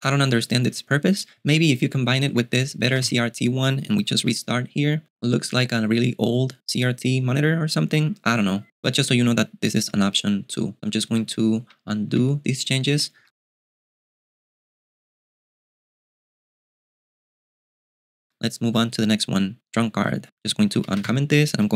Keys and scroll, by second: 1.4-3.5 typing, 4.4 super+q, 11.7 u, 12.1 u, 13.2 j, 18.3 j, 20.5-21.6 typing.